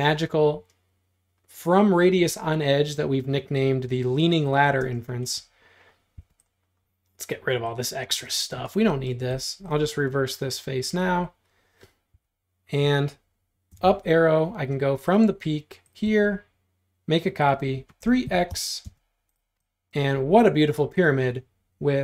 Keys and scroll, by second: 4.9 space, 6.2 e, 8.4 space, 12.2 q, 13.8 Page_Up, 18.0-18.5 typing.